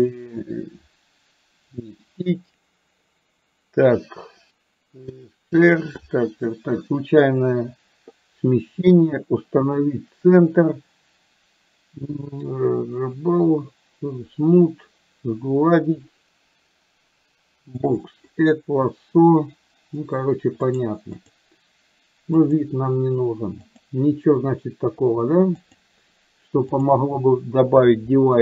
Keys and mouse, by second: 21.3-22.3 drag, 23.8-25.2 drag, 25.6-26.9 drag.